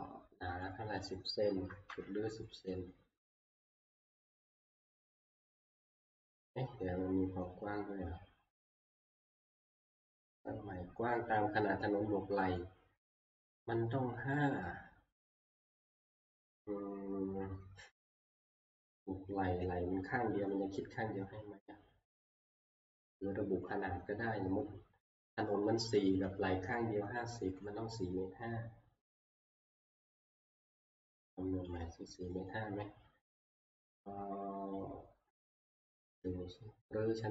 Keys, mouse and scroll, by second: 1.0 click, 1.7-2.4 typing, 1.7 scroll down 1, 1.9 middle click, 4.5 click, 6.8 middle click, 6.9 middle click, 7.1 middle click, 7.5-8.2 scroll, 8.2 scroll, 25.4-26.1 scroll, 27.7 middle click, 29.2 scroll, 30.3 click, 31.8 click, 32.2 middle click.